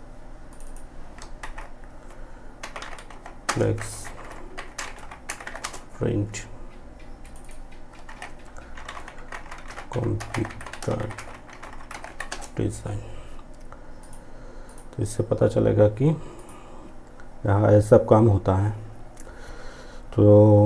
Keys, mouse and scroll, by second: 0.5 ctrl+a, 2.5 space, 3.6 p, 6.3 click, 7.0 ctrl+a, 9.6-10.0 typing, 11.3 space, 13.0 click.